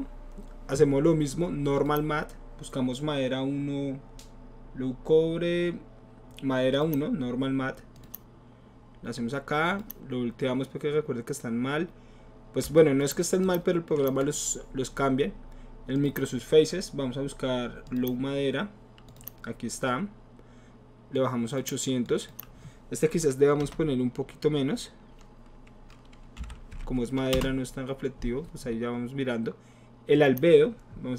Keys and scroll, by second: 23.6 BackSpace, 27.3 Return, 27.3 ,, 27.3 KP_8.